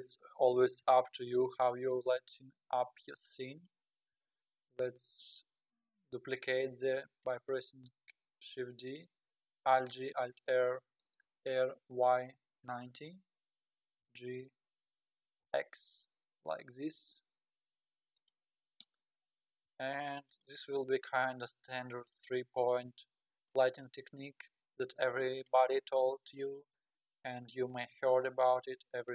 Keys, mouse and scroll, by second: 0.8 KP_7, 1.6 scroll up 5, 4.1 shift+d, 7.8-9.8 middle drag, 9.8 alt+g, 10.1 alt+r, 10.5-11.4 middle drag, 11.3 r, 14.0 g, 18.8 KP_7, 19.7 r, 20.9 g.